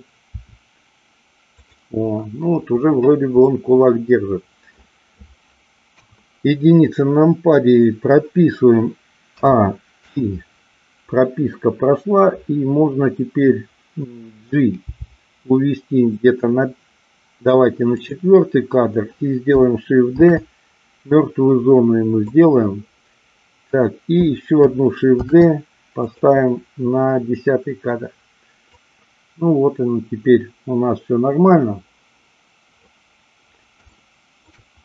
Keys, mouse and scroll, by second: 0.3 r, 1.5 click, 3.5-4.8 middle drag, 5.9 KP_1, 10.1 i, 14.8 g, 18.0 click, 20.1 shift+d, 22.4 click, 25.1 shift+d, 26.0 click, 28.7-32.9 drag, 33.9 shift+middle click.